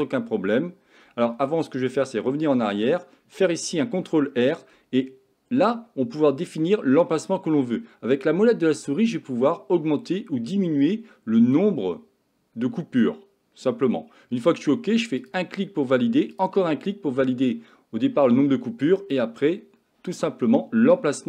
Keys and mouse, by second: 2.6 ctrl+z, 4.0 ctrl+r.